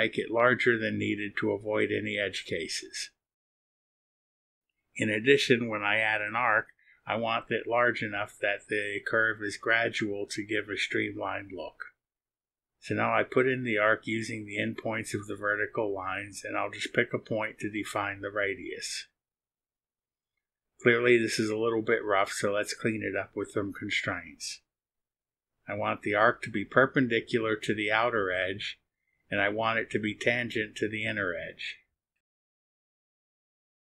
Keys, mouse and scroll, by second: 1.6 click, 2.7 right click, 3.4 right click, 8.0 click, 9.1 click, 12.0 click, 13.2 click, 17.2 click, 23.8 click, 24.9 click, 27.5 click, 30.6 click, 31.1 click, 33.2 click.